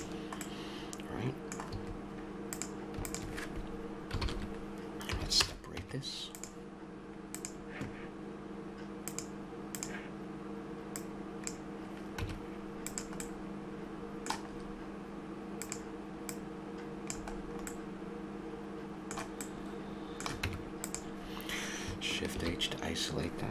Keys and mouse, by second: 1.7 a, 2.5-4.2 drag, 4.2 ctrl+l, 5.1 p, 5.8 Tab, 7.3-8.6 right drag, 12.2 Tab, 13.4 click, 14.1 middle click, 15.6-17.4 right drag, 17.4-19.5 middle drag, 20.0 middle click, 20.5 Tab, 22.3 shift+h.